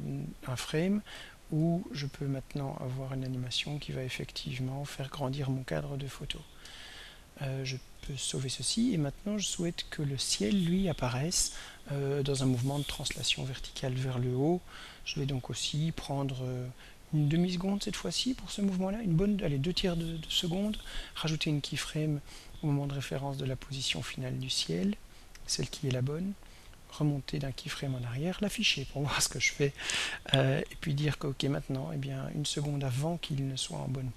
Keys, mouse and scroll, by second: 1.2-6.9 drag, 8.2 ctrl+s, 10.0 click, 19.3 click, 21.9 click, 24.5 click, 25.6 click, 27.5 click, 29.0 click.